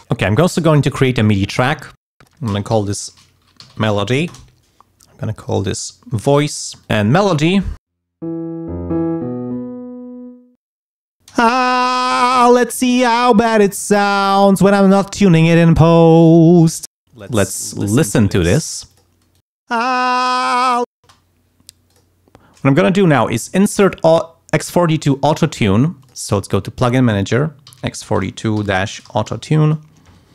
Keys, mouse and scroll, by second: 0.5 click, 2.0 click, 2.2 click, 2.7-4.6 typing, 5.3 click, 6.8 click, 11.3 shift+space, 17.2 click, 17.9 click, 18.9 click, 19.4 click, 19.8 space, 20.6 click, 21.0 space, 21.9 click, 23.6 right click, 26.0 click, 27.4-29.8 typing.